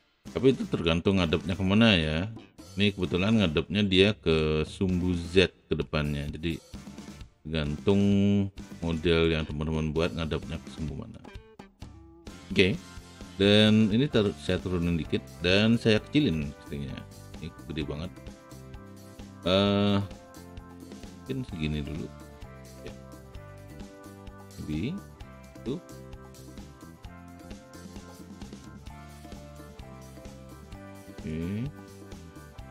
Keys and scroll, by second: 12.6 alt+w, 16.4 r, 23.3 w.